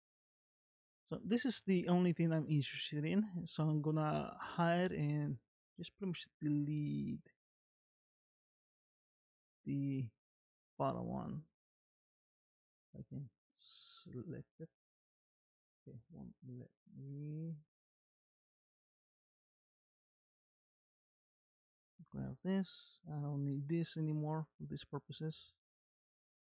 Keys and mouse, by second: 1.5 g, 5.4 middle click, 7.6 click, 8.3 click, 9.0 g, 10.7 click, 11.7 click, 12.3 g, 18.6 click, 19.6 g, 20.4 click, 21.1 click, 23.8 x, 25.9 click.